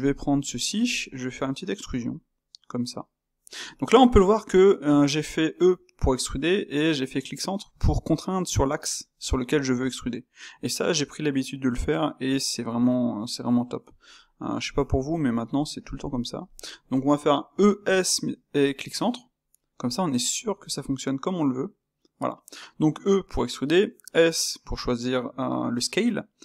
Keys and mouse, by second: 0.0 shift+click, 0.2 shift+click, 0.4-1.8 ctrl+middle drag, 1.8 e, 14.0 middle click, 14.6 click, 15.2 middle click, 15.8 shift+click, 16.0 shift+click, 16.4-17.5 shift+middle drag, 17.5 e.